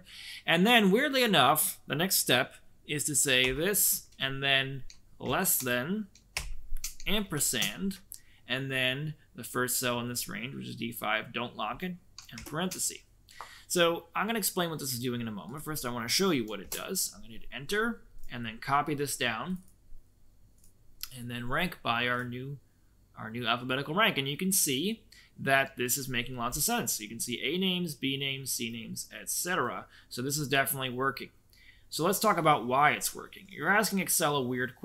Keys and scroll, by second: 3.3 shift+', 5.2 shift+,, 6.3 shift+', 7.2 shift+7, 12.3 shift+0, 16.5 Return.